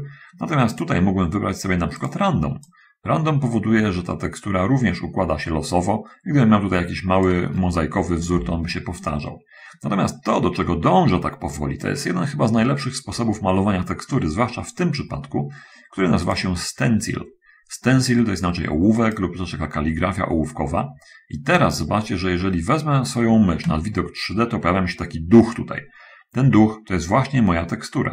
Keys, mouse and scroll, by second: 1.0 click, 2.4 click, 3.0-7.6 drag, 8.6 ctrl+z, 19.3 click.